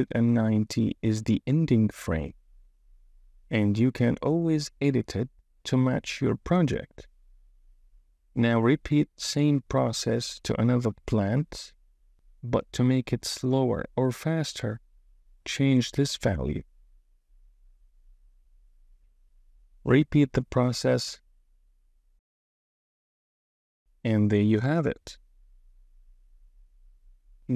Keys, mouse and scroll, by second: 8.8 click, 9.4-10.8 drag, 11.4-17.3 drag, 18.5 space, 18.7 click, 19.2 space, 19.4 click, 19.7 click, 19.9 space, 20.0 space, 20.1 click, 20.2 click, 20.4 click, 20.6 click, 20.8 click, 21.2 click, 21.5-23.7 typing, 21.6 click, 21.9 click, 22.6 click, 23.1 click, 26.1 space, 27.2 super+s.